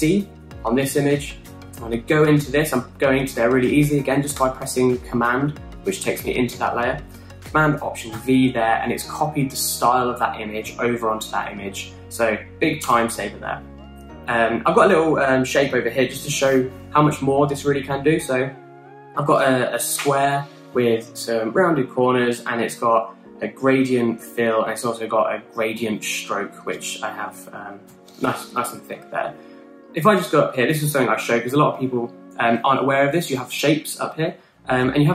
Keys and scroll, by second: 0.7 alt+super+c, 9.1 alt+super+v, 13.8 BackSpace, 28.1 Up, 28.2 Up, 28.8 Up.